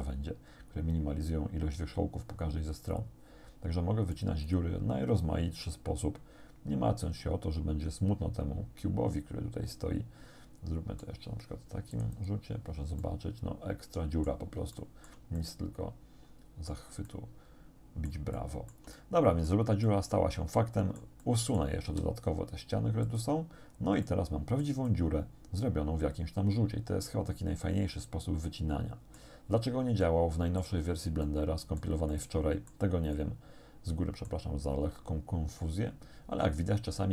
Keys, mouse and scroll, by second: 4.2 click, 5.7-11.2 drag, 12.0 click, 13.0-14.5 drag, 14.8 shift+click, 15.1 shift+middle click, 15.4-16.9 shift+middle drag, 17.1 middle click, 17.8 click, 18.4-19.7 shift+drag, 19.9-21.8 drag, 21.9 x, 23.1 click, 23.7 scroll down 1, 24.1 click, 25.4-29.4 drag, 30.0 shift+click, 31.3 click, 32.2 click, 33.2-34.5 drag.